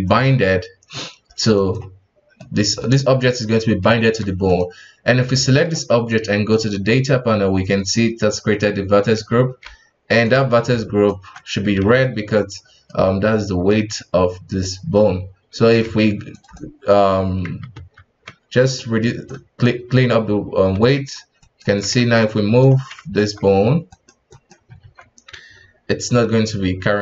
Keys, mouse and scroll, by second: 0.4 r, 2.3-4.0 middle drag, 4.0 ctrl+Tab, 4.4 right click, 5.3-6.5 middle drag, 6.5 click, 9.6 ctrl+Tab, 10.7 ctrl+Tab, 11.8 alt+a, 12.0 middle click, 12.4-12.8 scroll up 1, 12.8-14.0 middle drag, 14.0-14.6 scroll down 2, 14.6-15.8 middle drag, 15.8 f, 16.5-17.7 drag, 17.7 alt+q, 18.8-21.0 drag, 21.0 KP_1, 21.4 right click, 22.1 right click, 23.0 ctrl+Tab, 23.9 right click, 24.3 right click, 24.8 ctrl+Tab, 25.5 g.